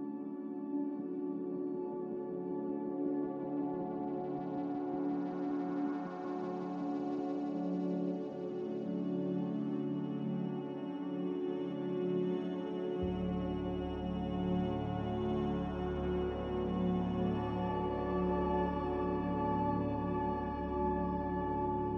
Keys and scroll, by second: 6.0 m.